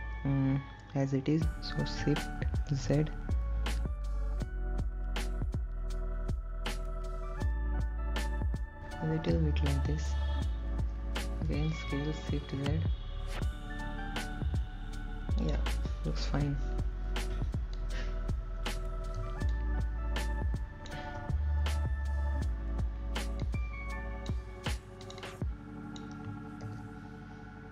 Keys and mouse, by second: 5.7 shift+z, 10.1 KP_1, 14.5 s, 15.6 shift+z, 18.5 click, 20.9 click, 22.7-24.0 shift+drag, 26.5 click.